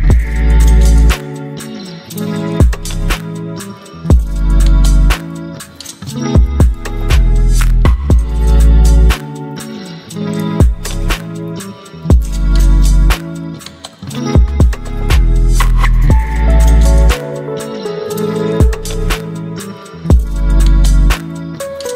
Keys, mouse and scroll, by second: 1.0-5.6 drag, 5.6 ctrl+t, 7.8-17.6 alt+drag, 19.7 ctrl+g, 21.0 click.